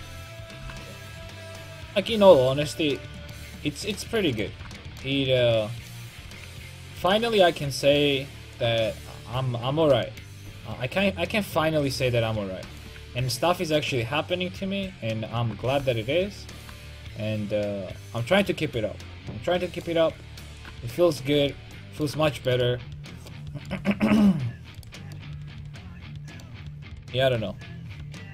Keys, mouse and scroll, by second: 0.7 g, 3.9-5.1 right drag, 7.7-8.8 right drag, 8.6-10.7 drag, 13.3 ctrl+z, 14.7 ctrl+z, 16.7-18.9 drag, 21.4 a, 22.0 click, 22.6-23.8 middle drag, 25.0-27.4 right drag, 27.4-28.3 drag.